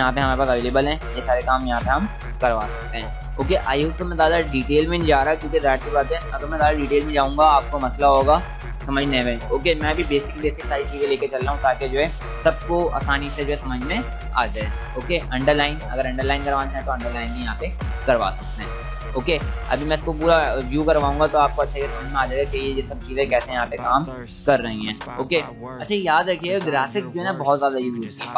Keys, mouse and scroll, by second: 15.2 click.